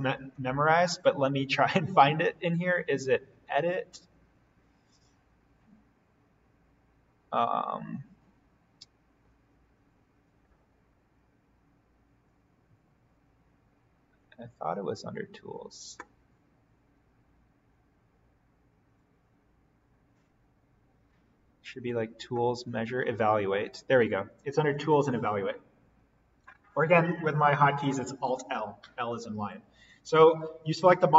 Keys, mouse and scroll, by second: 0.1 click, 29.8 click.